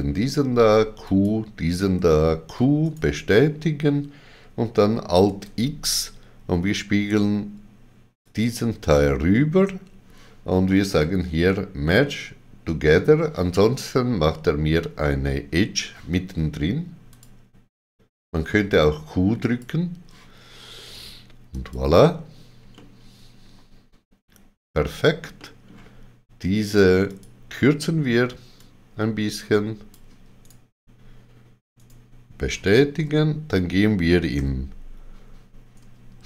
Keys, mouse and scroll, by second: 0.1 q, 1.0 click, 1.9 q, 2.8 right click, 5.2 alt+x, 8.2 click, 17.1 alt+x, 17.1 click, 19.4 click, 22.7 middle click, 25.3 middle click, 26.6 click, 27.0 click, 28.8 click, 30.3 right click, 31.7 right click.